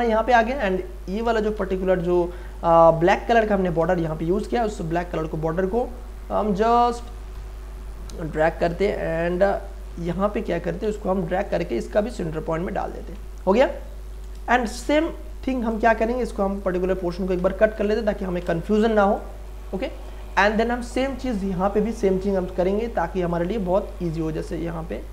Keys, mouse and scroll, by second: 1.6 m, 2.9 click, 3.8 space, 4.1 click, 4.3 space, 4.9 ctrl+space, 5.1 ctrl+click, 7.3 Right, 10.8 v, 11.4-13.1 drag, 13.1 space, 13.4 ctrl+click, 14.1 ctrl+d, 14.3 ctrl+space, 14.5 ctrl+click, 14.9 ctrl+space, 15.0 click, 16.0 m, 16.6 click, 17.4 Delete, 18.2 ctrl+d, 18.6 space, 18.9 click, 19.0 space, 20.3-25.1 ctrl+drag.